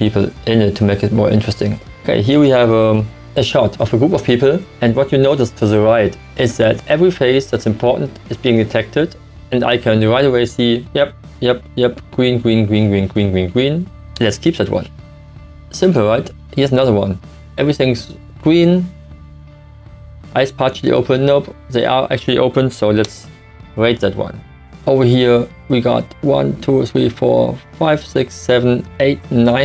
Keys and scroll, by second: 14.1 1, 23.0 1.